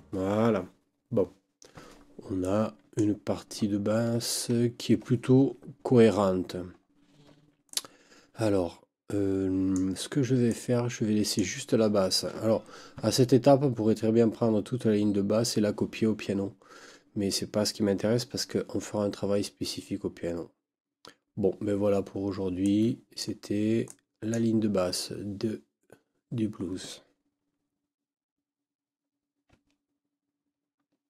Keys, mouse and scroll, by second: 2.4-3.1 drag, 3.7 ctrl+scroll down 2, 6.8 ctrl+scroll up 2, 7.7 ctrl+click, 10.5 click, 22.6-23.4 drag, 23.9 click, 24.3 click.